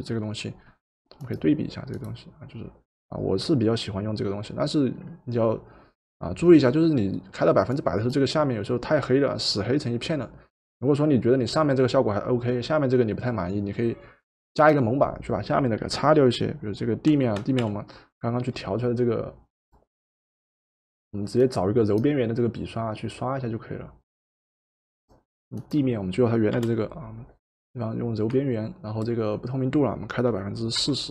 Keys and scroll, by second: 17.1 b, 17.7 b, 26.5 Return, 30.8 4.